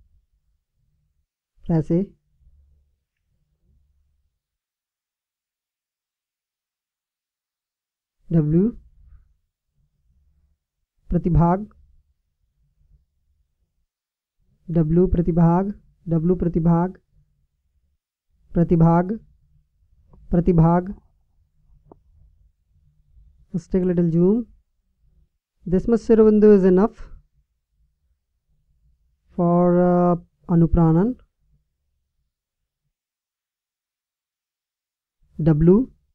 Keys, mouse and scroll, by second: 8.7 w, 14.8 w, 16.3 w, 18.1 w, 19.9 w, 22.5 KP_Decimal, 26.5-27.8 middle drag, 27.8-35.3 middle drag, 35.3 w.